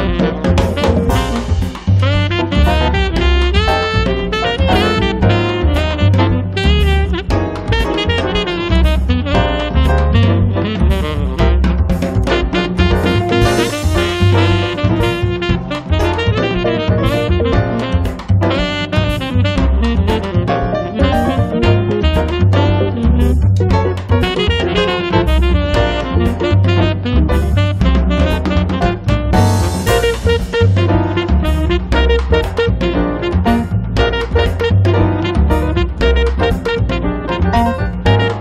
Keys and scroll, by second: 10.4 space.